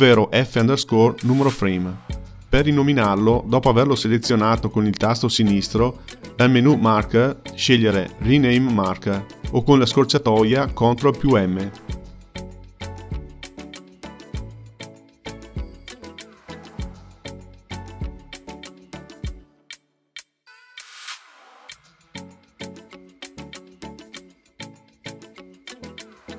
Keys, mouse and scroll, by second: 2.2 click, 3.5-6.6 drag, 15.8 click, 16.6 ctrl+m, 17.8 KP_Enter, 18.9 Left, 19.4 ctrl+m, 21.7 click, 22.1 ctrl+m, 24.1 click, 24.6 ctrl+m.